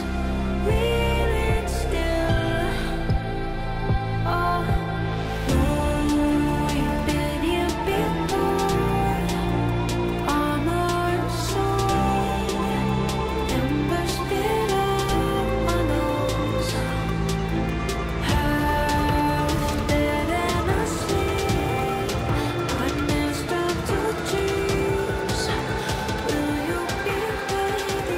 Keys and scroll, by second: 10.6 F9, 21.5 F3, 25.3 ctrl+z.